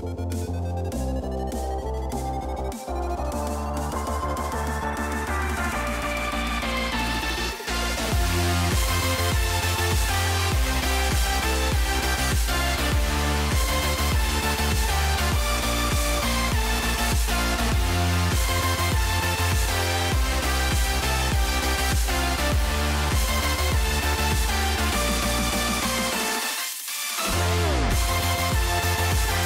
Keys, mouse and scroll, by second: 1.3 click, 2.1-4.4 drag, 8.4 shift+middle drag, 10.4-11.1 drag, 12.0-13.3 drag, 14.1 shift+middle click, 14.6 click, 15.6-16.4 drag, 16.8-17.2 shift+middle drag, 17.2 Tab, 20.1 middle click, 20.6 shift+middle click, 21.7 click, 23.6 click, 24.1 middle click, 24.6 shift+middle click, 25.1 shift+middle click, 25.5 shift+middle click, 26.6 ctrl+click, 27.0 middle click, 28.1 middle click, 28.8 shift+middle click.